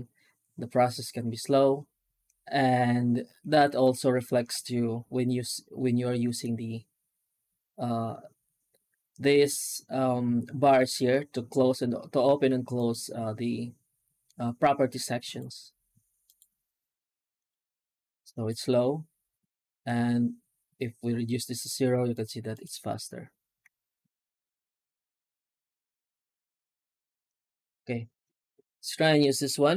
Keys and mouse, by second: 28.4-29.7 middle drag.